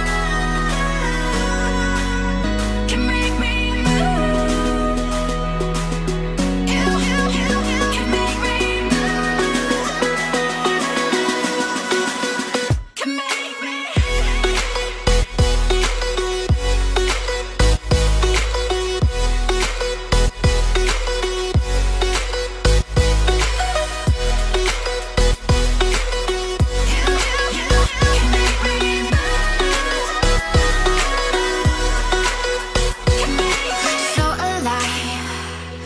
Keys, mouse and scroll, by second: 0.5 scroll up 2, 4.0 Tab, 5.3 Tab, 5.5 shift+middle click, 7.7-8.5 scroll up 2, 22.7 Escape, 23.5 middle click, 33.7 Escape, 34.1 scroll down 1, 34.6 Escape, 35.0-35.6 scroll down 1, 35.6-35.8 scroll down 2, 35.6 middle click.